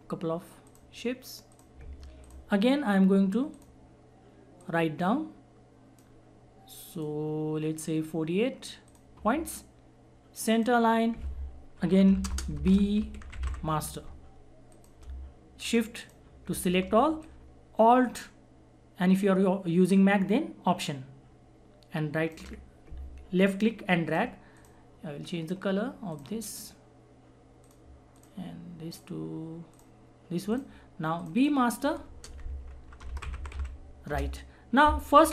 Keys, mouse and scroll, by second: 12.1 alt+shift+b, 12.2 alt+space, 12.6 alt+shift+m, 12.8 alt+a, 13.0 alt+s, 13.1 alt+t, 14.7 alt+click, 14.7-24.0 alt+drag, 32.4-34.0 typing, 34.1 Return.